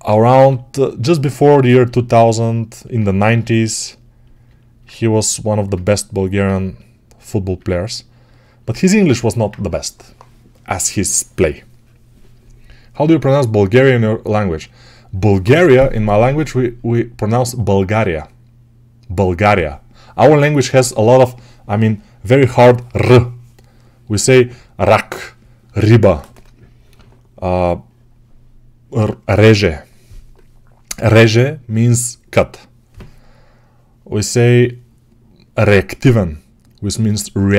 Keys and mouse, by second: 0.2 6, 3.2 g.